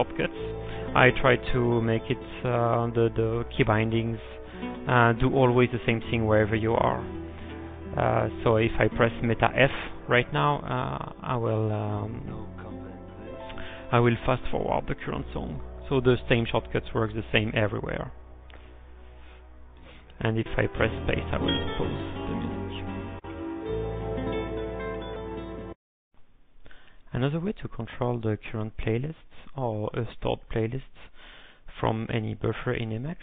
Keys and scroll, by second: 18.7-20.1 typing, 20.2 alt+f, 25.4-26.1 typing.